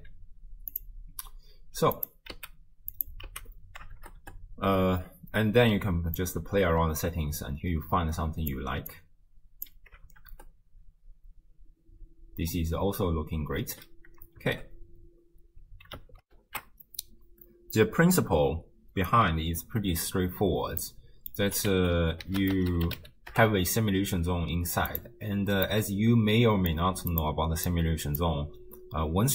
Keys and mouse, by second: 0.0 d, 0.0 a, 0.8 click, 2.0 click, 3.0 click, 3.0 x, 3.3 x, 4.0 shift+space, 6.2-8.6 drag, 6.2 space, 8.9 click, 10.1 shift+space, 13.7 space, 14.4 shift+space, 16.3 ctrl+alt+shift+q, 20.8 click, 21.7 ctrl+a, 25.7-26.8 middle drag.